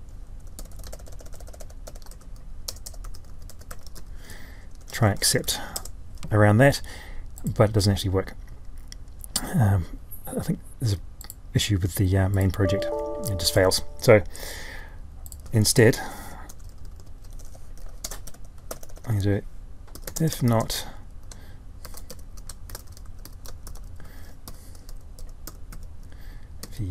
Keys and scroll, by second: 15.7 ctrl+y.